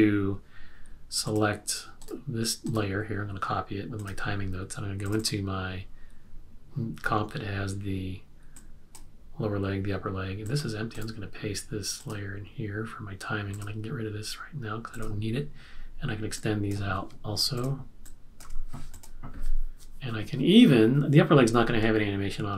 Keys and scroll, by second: 18.4 F6.